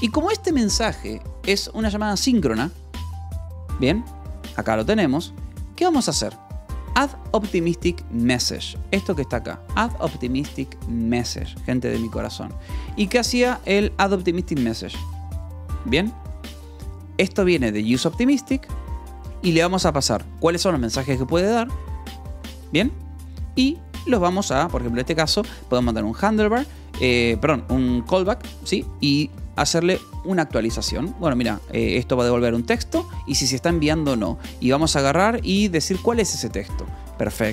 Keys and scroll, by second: 0.7 k, 4.0 j, 4.8 j, 5.1 Escape, 5.2 k, 6.5-10.2 typing, 9.2 Escape, 10.2 Escape, 11.3 k, 12.4 j, 13.4 k, 13.9 h, 15.1 g, 15.6 d, 16.9 l, 18.6 h, 19.2 Escape, 19.4 j, 20.7 shift+v, 22.3 Escape, 22.4 j, 23.2 k, 24.2 j, 24.6 Escape, 25.2 k, 26.3-28.4 typing, 28.2 Escape, 29.8 j, 31.0 Escape, 31.0 k, 32.4 j, 34.1 Escape, 34.3-37.3 typing, 37.0 Escape.